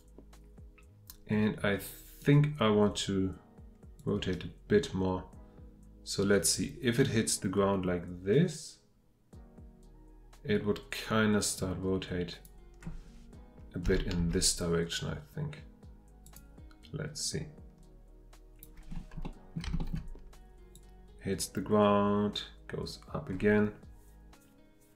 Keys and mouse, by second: 14.2 x, 19.0-19.3 middle drag, 19.8 shift+middle click.